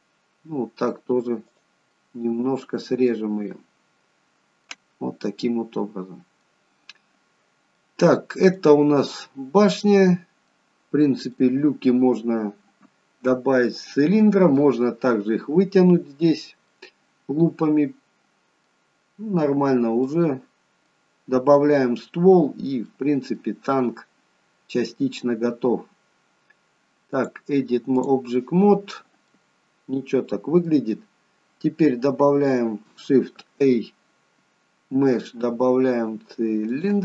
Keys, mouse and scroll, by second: 2.0 middle click, 3.6 middle click, 5.2-5.6 scroll down 1, 5.6 middle click, 7.9 middle click, 11.4 middle click, 16.9 middle click, 19.1-20.2 scroll down 6, 20.2 middle click, 21.3-21.7 scroll up 2, 21.7 middle click, 22.7-23.1 scroll up 1, 23.1 middle click, 27.3 click, 29.4 middle click, 33.6 shift+a.